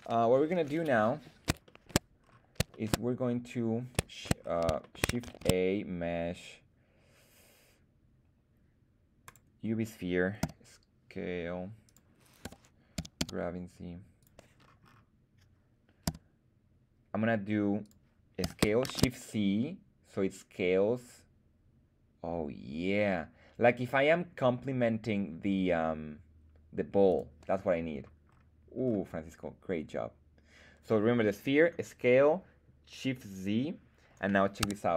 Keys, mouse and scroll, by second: 0.7-1.4 scroll up 1, 1.6 shift+middle drag, 2.1-2.5 scroll up 1, 2.7 shift+middle click, 4.3 scroll down 2, 4.7 shift+middle drag, 5.2 shift+a, 10.3 s, 11.8 click, 12.3 g, 12.9 x, 13.1 z, 14.1 click, 14.5-15.4 scroll up 4, 16.0 s, 17.7 click, 18.3 s, 18.8 shift+z, 27.0 click, 27.8-28.7 scroll down 4, 28.7-30.1 scroll up 2, 34.6 Tab.